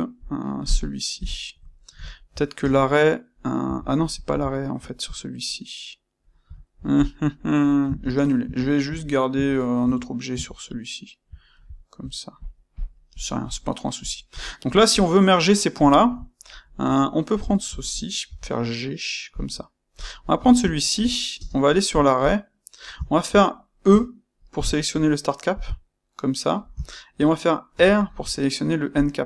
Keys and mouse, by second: 1.1 KP_1, 1.7-6.9 ctrl+shift+middle drag, 2.5 space, 3.6 Escape, 6.9 click, 7.0-12.3 middle drag, 8.0 ctrl+z, 12.6 click, 13.3 click, 13.9 click, 14.3-14.8 ctrl+middle drag, 14.8 click, 15.8-17.3 ctrl+middle drag, 17.3 shift+click, 18.2 g, 19.3 click, 19.9 click, 20.4-25.5 ctrl+shift+middle drag, 21.3 space, 25.5-26.8 drag, 26.8-28.9 shift+middle drag, 28.9-29.2 drag.